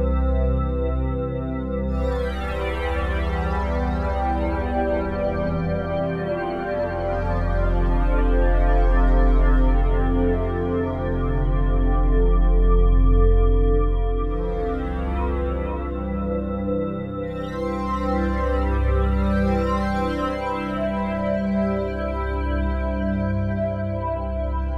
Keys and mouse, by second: 0.3 click, 1.1 shift+click, 2.0-2.3 typing, 4.1 shift+click, 5.9 click, 6.9-7.3 typing, 8.8 click, 9.5 typing, 10.1-11.9 drag, 12.9-15.4 drag, 15.6 click, 16.6 ctrl+s, 17.7 click, 18.4 click, 19.2 click, 21.2 ctrl+s, 22.3 click.